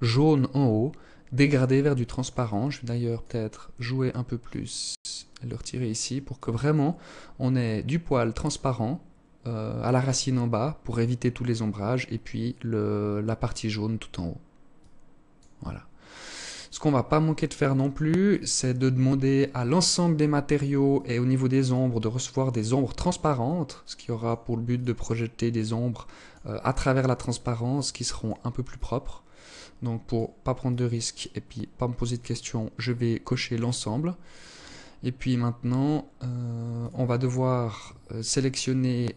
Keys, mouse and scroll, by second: 1.6 click, 3.6 click, 5.4 click, 13.8 click, 15.1-15.9 scroll up 8, 16.4 click, 17.4 click, 17.9-18.7 scroll up 6, 18.7 click, 20.0 click, 22.5 click, 23.8 click, 24.6 click, 26.0 click, 26.8 click, 27.8 click, 28.6 click, 29.7 click, 30.5 click, 33.4 click, 35.8 click, 37.7-38.8 scroll up 4, 38.8 scroll up 4.